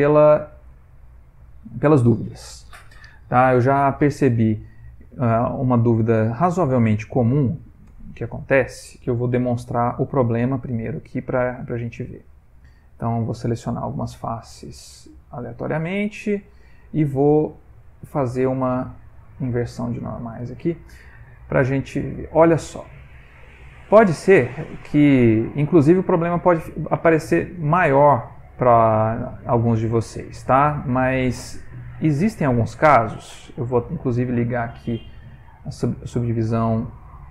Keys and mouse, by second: 0.3 click, 0.9 middle click, 4.5 middle click, 4.6 middle click, 5.1 ctrl+middle click, 5.8 middle click, 6.4 middle click, 7.0 ctrl+middle click, 7.5 middle click, 8.4 Tab, 8.7 middle click, 10.2 a, 10.5 a, 10.9 c, 15.0 click, 21.0 Tab, 21.1 middle click, 21.2 middle click, 21.4 middle click, 21.5 middle click, 22.1 ctrl+middle click, 22.6 middle click, 22.7 middle click, 23.2-24.5 shift+middle click, 24.2 middle click, 26.7 middle click, 27.3 middle click, 27.5 middle click, 29.8 click, 31.0 click, 34.9 middle click, 36.3 middle click, 36.5-37.3 middle click, 37.2 middle click.